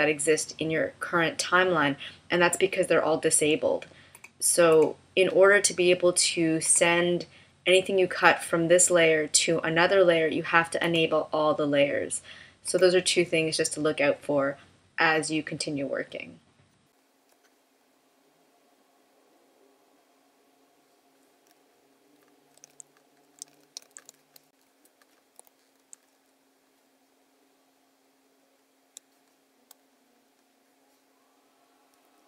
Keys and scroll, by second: 22.6 super+=, 23.5 super+=, 24.1 space, 25.7 super+F9, 28.9 space.